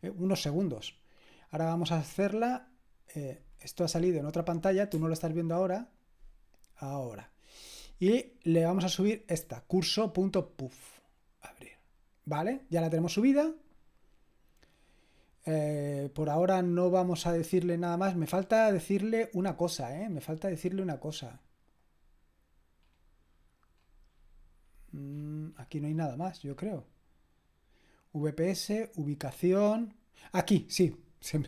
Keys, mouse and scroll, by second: 1.1 click, 3.5-4.8 drag, 4.9 click, 8.6-10.5 drag, 11.2 click, 16.3-17.9 scroll down 1, 17.9-18.6 scroll down 1, 18.6-19.6 scroll down 1, 19.6-20.6 scroll down 1, 20.6-21.7 scroll down 1, 21.7 scroll down 1, 21.9-22.9 drag, 22.9-24.9 scroll down 1, 24.9-26.0 scroll down 1, 26.0-27.0 scroll down 1, 27.0-27.7 scroll up 2, 27.7-31.4 scroll up 1.